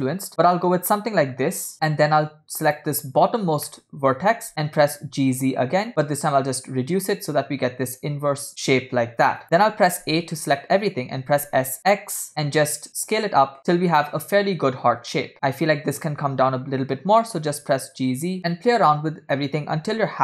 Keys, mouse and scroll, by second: 2.7 click, 3.8 shift+middle click, 4.9 g, 10.2 a, 11.5 s, 15.6 click, 16.8 g, 18.4 a, 19.9 a.